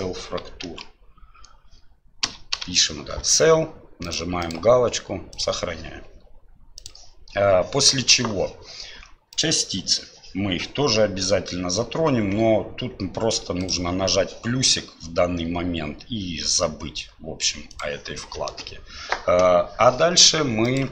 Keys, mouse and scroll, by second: 20.7-20.9 drag.